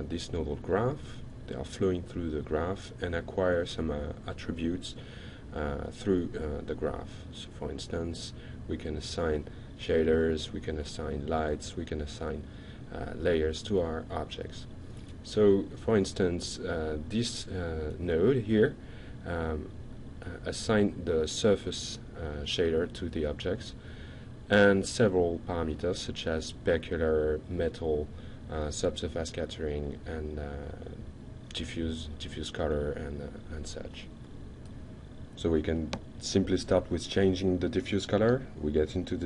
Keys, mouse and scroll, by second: 4.6 ctrl+click, 5.7 ctrl+click, 8.8 ctrl+click.